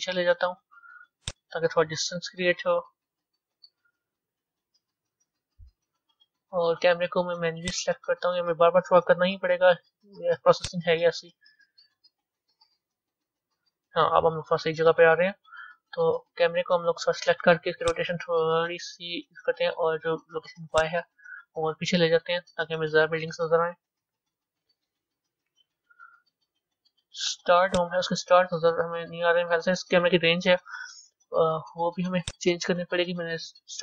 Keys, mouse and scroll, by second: 2.0 KP_0, 3.7 KP_0, 4.8-7.7 middle drag, 7.7 click, 9.0 g, 12.5 KP_0, 17.9-23.7 drag, 27.8 click, 28.5-29.3 middle drag, 29.3 scroll down 4, 30.1 scroll down 3, 32.3 click.